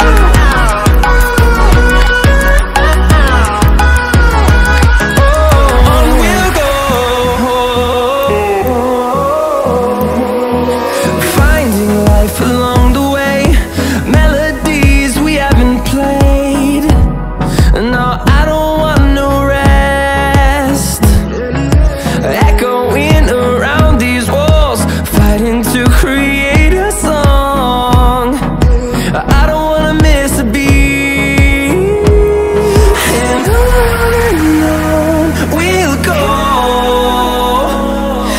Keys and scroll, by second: 23.5 ctrl+d.